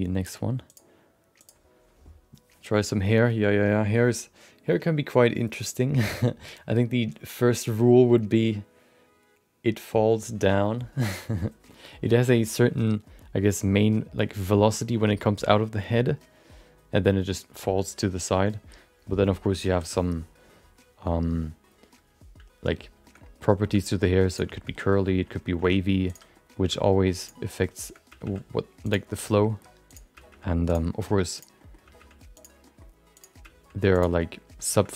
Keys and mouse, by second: 0.7-3.4 drag, 23.2 middle click, 23.6 shift+middle click, 23.8 middle click, 24.3 click, 24.7 middle click, 25.1 shift+middle click, 25.3 middle click, 25.6 Tab, 26.0 click, 26.3 middle click, 26.7 g, 27.7 shift+click, 28.0 g, 29.2 middle click, 29.5 shift+middle click, 29.9 click, 30.1 g, 30.9 middle click, 31.3 click, 31.5 middle click, 31.8 g, 32.6 middle click, 33.1 click, 33.4 g, 34.1 middle click, 34.8 middle click.